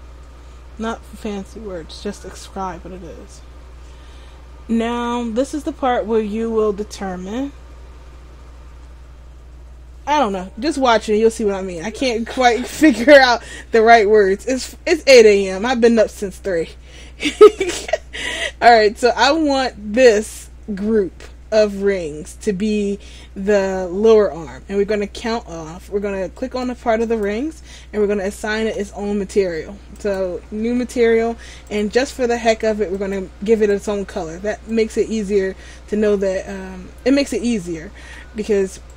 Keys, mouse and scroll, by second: 12.2 scroll up 2, 17.9 middle click, 26.5 right click, 30.2 click, 34.9 right click.